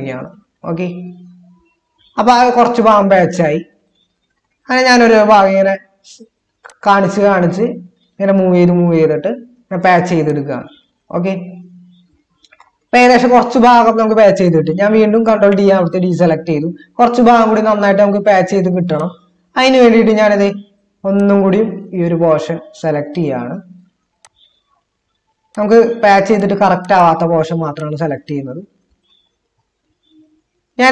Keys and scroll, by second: 15.5 ctrl+d, 29.9 ctrl+z.